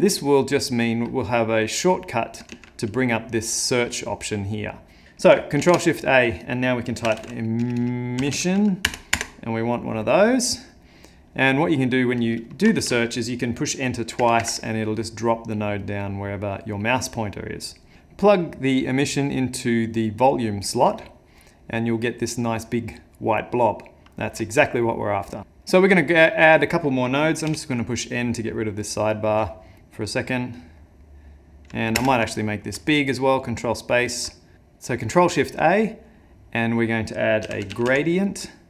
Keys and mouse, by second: 2.5 shift+a, 5.6 ctrl+shift+a, 7.7 BackSpace, 8.5 s, 11.5 click, 12.2 click, 12.8 ctrl+shift+a, 14.4 Escape, 15.8 click, 25.4 click, 25.7 middle click, 27.5 n, 28.3 middle click, 29.2 middle click, 30.0 middle click, 30.8 middle click, 32.0 ctrl+space, 32.5 middle click, 32.9 ctrl+middle click, 34.3 ctrl+middle click.